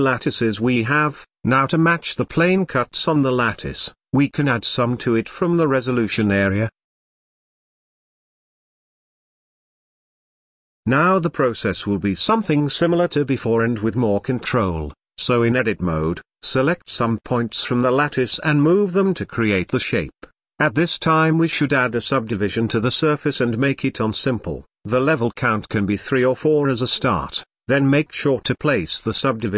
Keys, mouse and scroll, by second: 3.8-5.4 middle drag, 5.4 Tab, 6.1 click, 7.7-10.5 drag, 10.5-12.2 shift+middle drag, 12.2 click, 13.2 shift+click, 13.9 scroll down 2, 14.9 middle click, 15.6-16.3 scroll down 2, 16.3 g, 21.5-22.9 middle drag, 22.9 scroll up 2, 24.0 Tab, 24.8 click, 26.4 click, 27.0-29.1 drag.